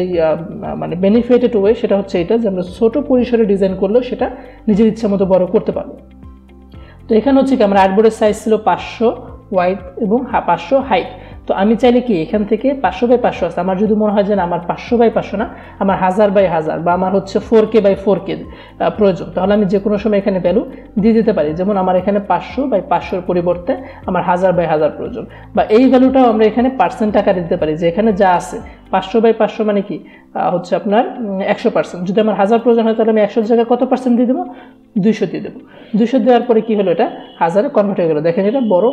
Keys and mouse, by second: 19.5 click, 25.7 click, 32.6 click, 36.5 click.